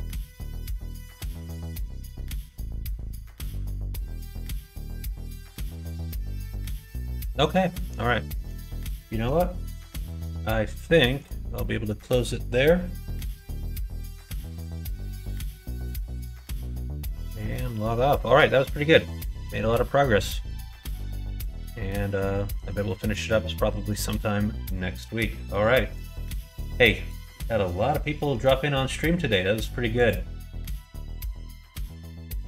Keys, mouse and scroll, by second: 0.0 click, 0.5 middle click, 1.7 middle click, 2.4 middle click, 4.3 middle click, 4.7 shift+middle click, 5.1 middle click, 5.4 middle click, 5.7-7.4 middle drag, 7.6 middle click, 8.2 middle click, 8.7 shift+middle click, 10.7 shift+middle click, 11.5 middle click, 12.9 middle click, 13.2 shift+middle click, 13.5 shift+middle click, 14.1 shift+middle click, 15.0 middle click, 15.6 shift+middle click, 20.1 middle click, 20.6 middle click, 21.2 shift+middle click, 21.9 middle click, 22.4 middle click.